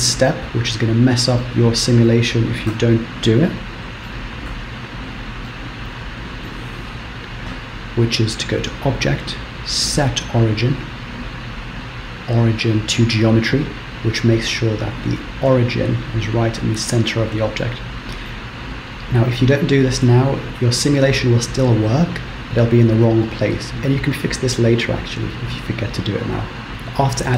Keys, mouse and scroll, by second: 0.2-0.7 scroll down 1, 1.4 middle click, 2.9 KP_1, 3.5 middle click, 4.7 KP_1, 5.5 shift+middle click, 8.5 click, 17.6 middle click, 18.9 scroll down 2.